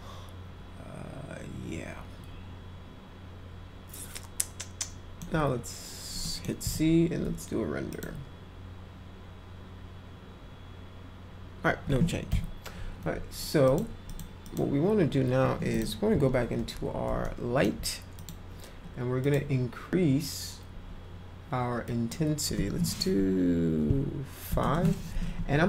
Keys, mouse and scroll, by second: 6.2 middle click, 7.8 click, 12.3 Escape, 13.6 click, 14.0 click, 14.4 click, 15.7 click, 16.1 p, 17.2 alt+middle click, 18.1 click, 19.2 click, 21.9 click, 24.7 Return.